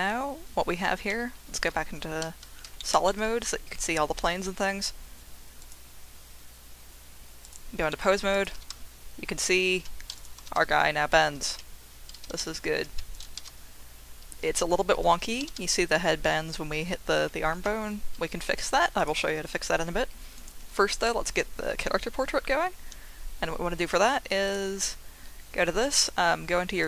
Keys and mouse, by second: 1.1 z, 2.2 z, 2.8 shift+middle click, 3.0-4.5 middle drag, 5.7-7.7 drag, 7.9 middle drag, 8.4 drag, 8.5 r, 8.7 z, 9.7 Escape, 10.2 click, 10.4 r, 10.5 x, 11.5 Escape, 12.2 r, 12.4 x, 12.8 Escape, 13.2 click, 13.3 r, 13.5 z, 14.4 Escape, 15.4 r, 15.6 z, 17.5 Escape, 18.6 click, 24.5 click.